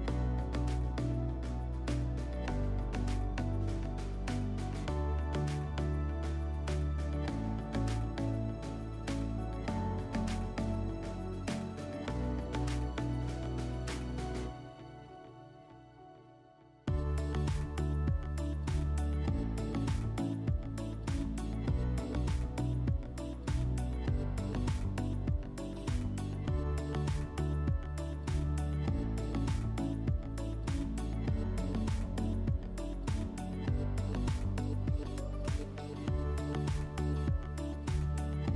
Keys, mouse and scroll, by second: 0.7 click, 1.6 click, 2.4 click, 4.5 click, 6.6 click, 8.9 click, 10.4 click, 10.8 click, 12.5 click, 14.2 click, 15.8 click, 17.2 click, 18.8 alt+w, 19.7 alt+w, 22.4 alt+middle click, 23.3 click, 24.2 ctrl+click, 25.2 ctrl+click, 26.0 ctrl+click, 27.3 alt+middle click, 30.2 click, 33.0 alt+middle click, 33.8 click, 34.7 ctrl+click, 35.6 alt+middle click, 38.0 click.